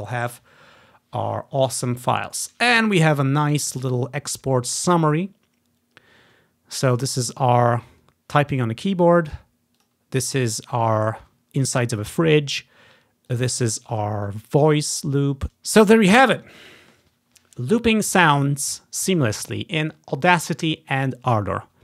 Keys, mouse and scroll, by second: 3.5-5.7 drag, 9.9-13.4 drag, 13.5-14.8 drag, 14.8 click, 15.5 Delete.